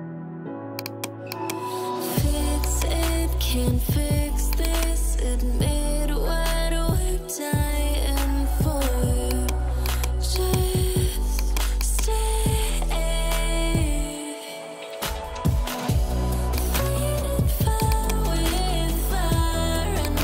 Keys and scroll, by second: 6.9 6, 8.6 0, 18.4-19.3 typing.